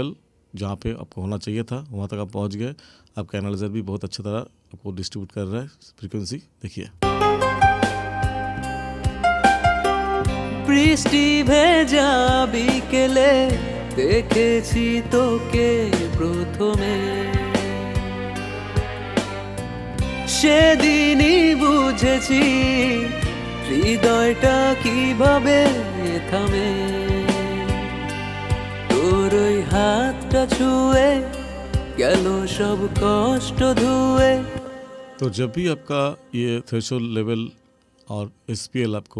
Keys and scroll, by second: 7.0 space, 34.5 space.